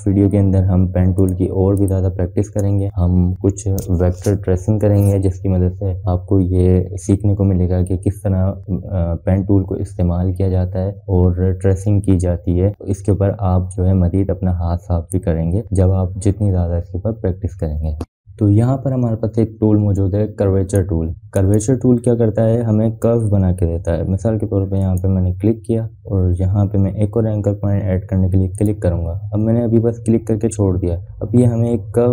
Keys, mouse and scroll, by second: 0.0 space, 0.2 click, 3.2 ctrl+0, 19.3 BackSpace, 21.7-22.6 drag, 26.5 click, 30.6 click.